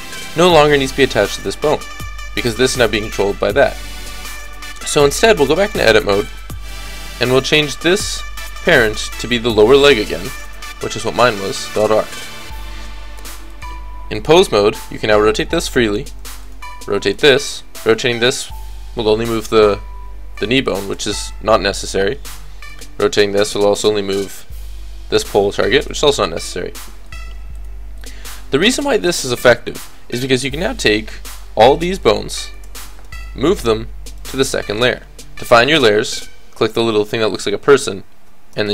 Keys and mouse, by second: 5.6-9.2 drag, 5.7 right click, 13.5-15.3 drag, 14.8 r, 16.4-19.9 drag, 16.6 g, 17.9 r, 21.1 ctrl+z, 22.7-24.1 drag, 22.9 r, 25.9 ctrl+z, 28.7 a, 28.9 a, 29.3 alt+r, 29.6 alt+g, 30.2-32.8 drag, 33.2 m, 34.4-36.1 middle drag, 37.3-38.7 drag.